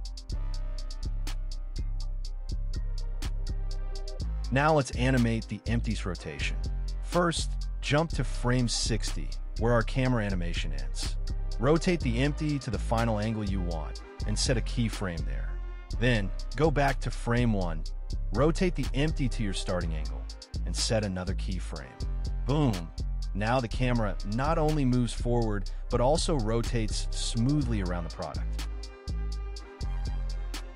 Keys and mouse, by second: 1.7 r, 1.9 z, 4.5 KP_0, 6.3-7.5 drag, 8.1-9.3 drag, 11.0 r, 11.3 y, 17.3 click, 19.6 shift+Left, 22.6 r, 22.9 y, 25.5 click, 26.6 i, 27.2 space, 29.6 space.